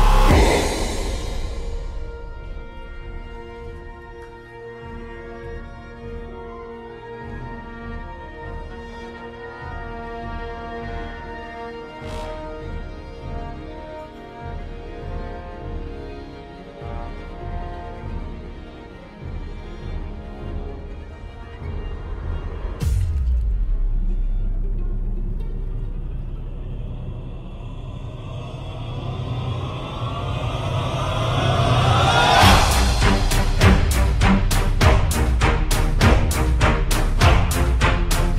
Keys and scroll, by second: 11.2-12.2 typing, 13.5-14.3 typing, 26.8-27.9 typing, 29.9 c.